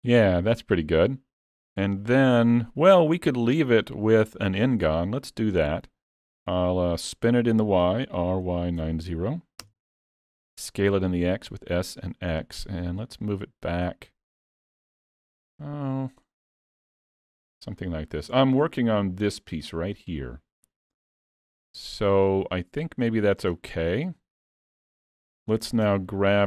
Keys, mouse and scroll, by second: 2.8 click, 8.2 r, 11.5 s, 13.1 click, 15.6 middle click, 17.0 s, 18.4 shift+middle click, 18.8 shift+scroll up 1, 20.2-20.5 scroll up 1, 21.3 scroll up 1, 21.4 middle click, 22.9-23.2 scroll up 2, 23.2 shift+middle click, 23.6 middle click, 24.2 shift+middle click, 25.0 middle click, 25.9 Tab.